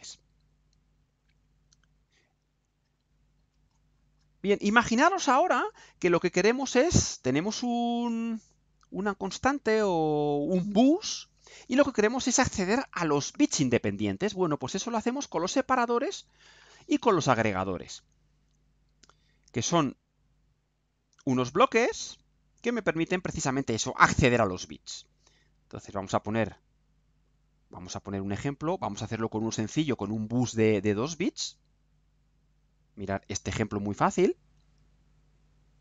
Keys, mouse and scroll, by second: 0.9 click, 2.7 click, 3.2-4.5 scroll down 2, 4.5 scroll down 1, 5.0 scroll up 2, 5.7 scroll up 2, 6.2-6.8 scroll down 4, 7.7-8.0 scroll down 2, 9.4-10.1 scroll down 4, 20.5 click, 31.3 click, 35.1 click.